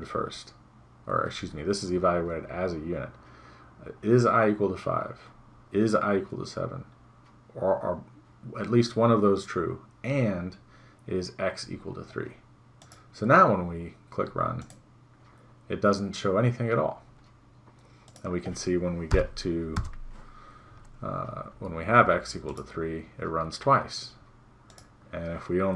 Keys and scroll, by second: 19.2 BackSpace.